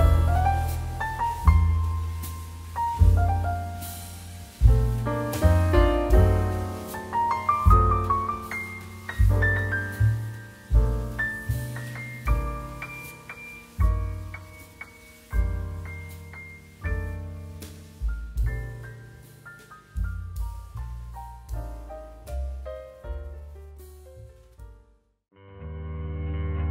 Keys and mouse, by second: 2.6 click, 4.3 click, 5.7 g, 7.1 click, 7.6 r, 7.8 Escape, 9.5 g, 9.8 ctrl+z, 11.3 click, 11.4 g, 12.0 click, 12.3 r, 13.1 Escape, 14.0 right click, 14.2 click, 14.5 right click, 14.7 click, 24.8 click.